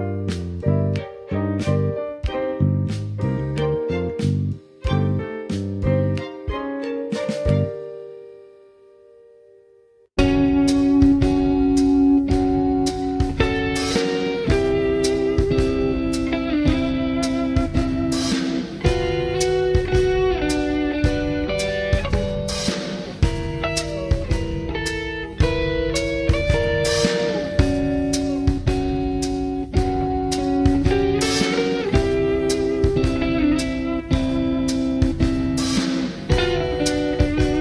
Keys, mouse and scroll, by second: 8.3-20.8 drag, 24.1 middle click, 24.6-25.3 scroll up 2, 25.3-28.6 middle drag, 27.1 r, 29.7 click, 30.7 g, 34.3 click, 34.8 g.